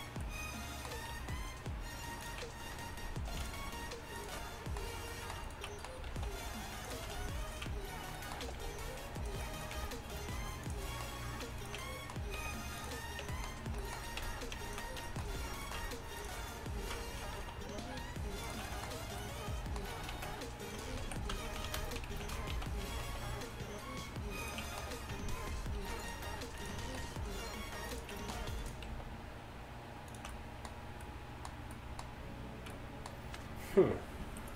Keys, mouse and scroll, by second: 1.2 alt+s, 3.4 ctrl+r, 6.2 alt+s, 8.5 g, 9.8 g, 13.3 Tab, 14.3 Tab, 14.9 middle click, 15.3 middle click, 15.5 middle click, 16.2-17.3 drag, 17.4 alt+s, 17.5-18.5 drag, 20.2 ctrl+z, 21.0 ctrl+z, 21.5 z, 22.1 ctrl+shift+z, 23.1 alt+s, 25.8 ctrl+r, 26.6 ctrl+r, 26.9 alt+s, 28.9 alt+s.